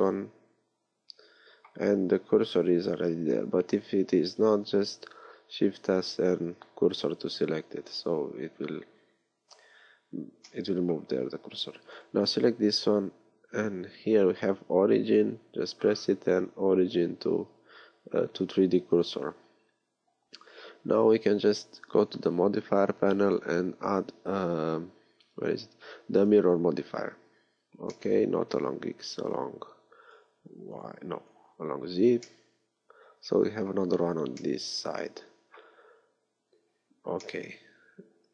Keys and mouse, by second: 5.3 shift+s, 11.9-19.0 drag, 21.8-26.3 drag, 28.0-29.3 middle drag, 29.3-34.5 drag, 34.5-37.3 middle drag.